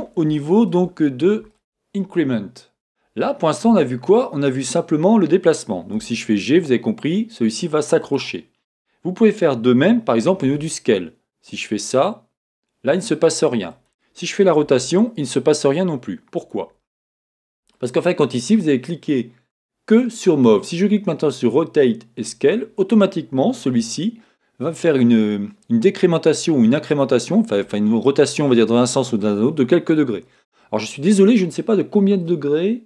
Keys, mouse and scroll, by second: 0.0 middle click, 0.0-0.3 scroll down 2, 0.7 shift+scroll up 1, 1.0 scroll down 2, 1.0 middle click, 1.5 shift+middle click, 1.5-8.1 drag, 3.7 Tab, 6.0 g, 10.4 s, 13.8 click, 14.7 r, 16.5 click, 17.7-32.8 drag, 23.8 r.